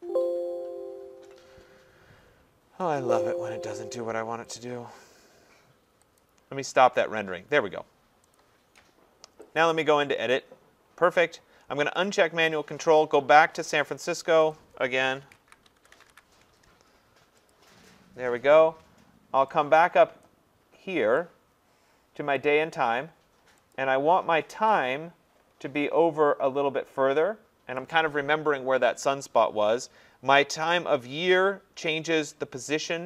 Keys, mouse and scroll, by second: 3.0 click, 4.6 click, 6.2 click, 8.4 click, 9.6 click, 12.1 click, 13.9 click, 14.5 click, 14.9-17.6 typing, 17.5 click, 20.3 click, 22.4 click, 23.8 click, 27.7 click.